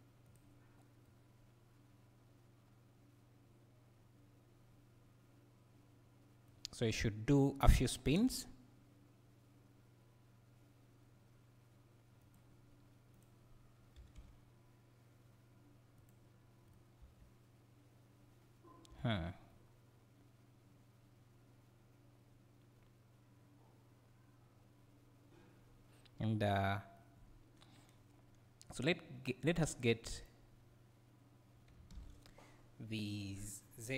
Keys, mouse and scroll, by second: 0.4 click, 1.1-6.8 right drag, 6.8 click, 8.1 g, 13.1 click, 14.0 g, 16.1 click, 16.7 right click, 17.0 space, 19.0 Escape, 19.5-29.6 right drag, 29.6 click.